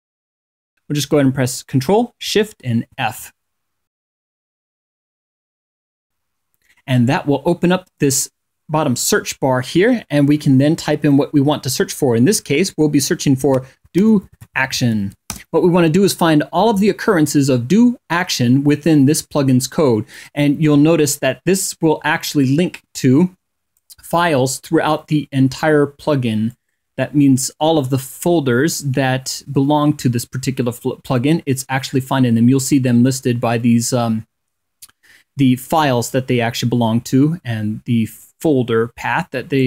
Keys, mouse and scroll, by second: 4.8 ctrl+shift+f, 7.6 click, 7.9 click, 19.8-23.6 drag, 26.1-31.0 drag, 37.9-39.4 drag.